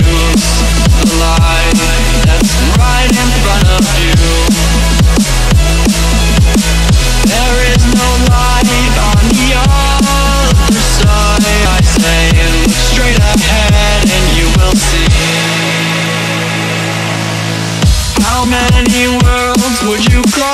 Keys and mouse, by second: 1.1 click, 3.9 ctrl+c, 4.7 click, 7.2 ctrl+a, 7.9-13.8 drag, 14.7 click, 16.8 space, 17.0 click, 17.1 space, 17.9 click, 18.9 BackSpace, 20.1 click.